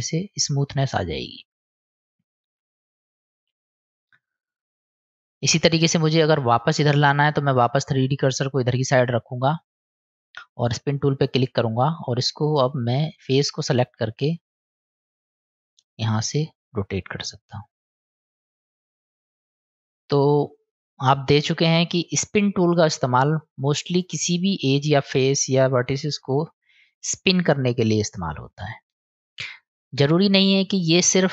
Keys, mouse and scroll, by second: 2.9 click, 3.5-5.4 middle drag, 7.9 click, 9.0 click, 11.1 click, 16.1-18.8 drag, 19.2 click, 20.0-20.8 middle drag, 22.0-22.4 middle drag, 23.6-24.1 middle drag, 28.1 click, 29.3 click, 29.7 click.